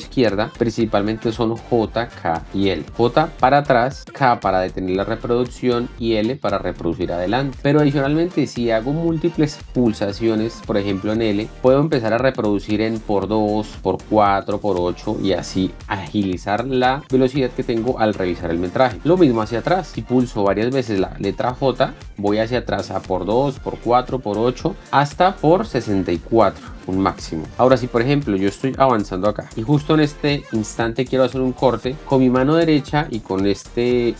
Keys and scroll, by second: 3.8-4.6 typing, 6.0 l, 7.5 k, 11.5 l, 15.0 k, 20.0 j, 27.0 k, 27.7 l, 29.3-30.7 typing.